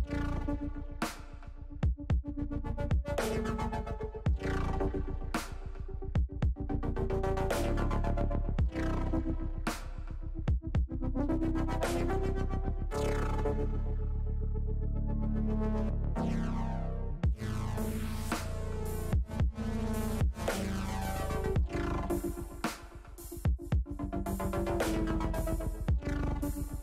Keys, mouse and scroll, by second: 0.2 ctrl+z, 1.2 r, 2.2 click, 3.1 click, 4.5 middle click, 6.0 middle click, 6.4-7.5 middle drag, 7.7-9.4 middle drag, 10.0 middle click, 10.6 middle click, 12.6 middle click, 14.7 shift+click, 15.9 shift+click, 16.7 shift+click, 17.2 shift+click, 18.0 middle click, 19.0 click, 20.1 ctrl+z, 20.9 click, 21.8 click, 22.8 click, 24.8 shift+click, 25.9 ctrl+z, 26.4 click.